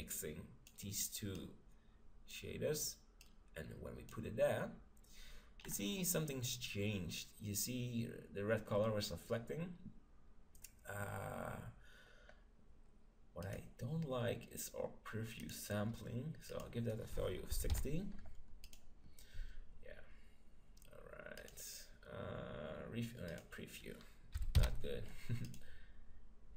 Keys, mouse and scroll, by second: 3.2-5.0 drag, 5.7-7.7 middle drag, 13.4-15.2 drag, 15.4-18.2 drag, 21.4-25.0 drag.